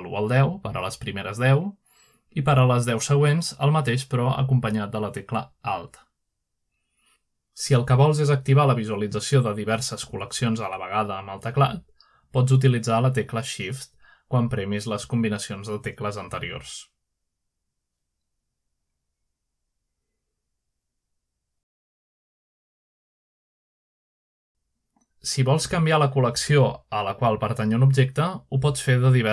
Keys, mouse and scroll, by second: 0.0-3.6 typing, 6.1 alt+1, 6.9 alt+2, 7.8 alt+3, 9.5 alt+1, 10.1 alt+2, 10.6 alt+3, 14.2 ", 15.1 alt+2, 17.0 alt+!, 19.3 shift+2, 19.9 shift+3, 20.6 shift+4, 26.9 click, 28.4 click, 29.0 click.